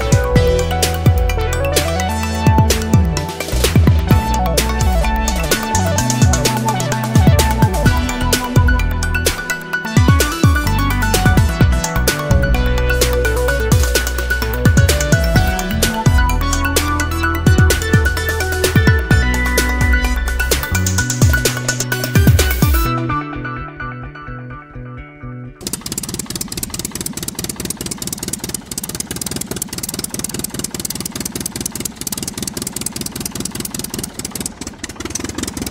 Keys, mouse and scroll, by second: 2.2 click, 3.2 0, 4.0 click, 4.6 0, 5.9 click, 9.8 0, 11.8 click, 12.6 click, 13.6 0, 15.7 click, 17.6 click, 18.4 middle click, 18.7-19.8 drag, 20.3-20.7 scroll up 1, 20.7-21.8 drag, 22.2 0, 23.3 scroll down 2, 23.9 1, 25.1 scroll down 2, 25.8-26.2 scroll down 2, 28.3 click, 29.3-35.7 drag.